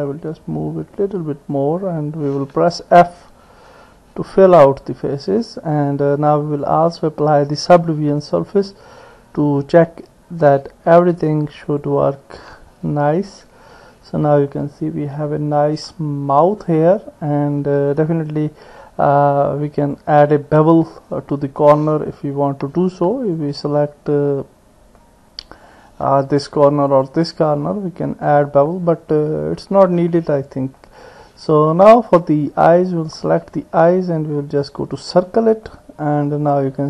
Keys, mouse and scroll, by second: 2.4 f, 3.3-5.2 middle drag, 6.8-8.7 drag, 11.7 click, 13.5 Tab, 14.6-16.9 middle drag, 20.8 Tab, 25.0 middle click, 26.9 alt+click, 27.7 middle click, 30.8-31.8 middle drag, 33.1 alt+click, 34.6 click, 35.7 click.